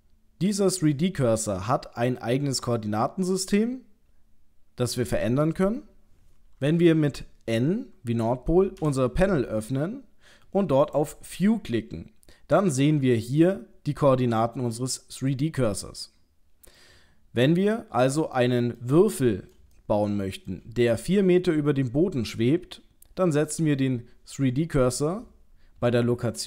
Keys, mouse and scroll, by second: 8.8 n, 10.8 click, 16.8 middle click, 18.4 shift+middle click, 19.0 middle click, 19.8 shift+middle click.